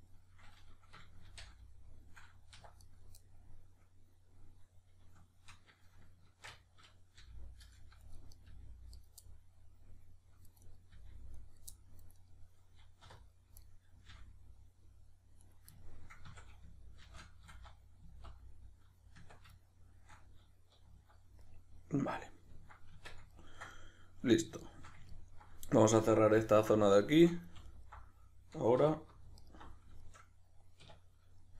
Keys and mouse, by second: 1.2 shift+n, 2.8 right click, 3.2-8.1 middle drag, 6.2 shift+Tab, 7.2 g, 8.3 right click, 8.5 g, 9.0 right click, 9.2-10.6 middle drag, 10.6 right click, 11.0 g, 11.5 right click, 11.7-12.2 middle drag, 12.2 right click, 13.0 3, 13.2 right click, 13.6-15.5 middle drag, 14.1 g, 15.5 right click, 15.8-17.0 ctrl+middle drag, 16.2 a, 17.0 shift+n, 19.6 shift+middle click, 20.9 z, 21.4 middle click, 23.0 Tab, 23.7-26.4 middle drag, 26.4 alt+right click, 27.0-27.7 shift+middle drag, 27.7 alt+right click, 28.8 2, 29.4 alt+right click, 30.0-31.5 shift+middle drag, 30.8 \.